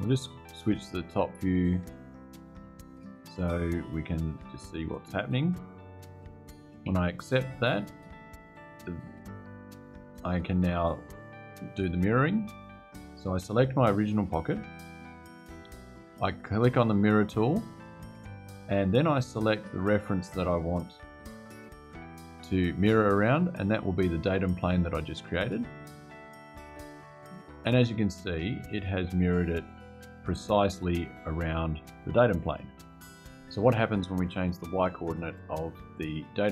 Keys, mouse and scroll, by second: 1.0 click, 3.9-4.4 scroll up 1, 6.6 Return, 13.7 click, 16.5 click, 18.4 click, 19.6 click, 25.1 click, 30.0 click.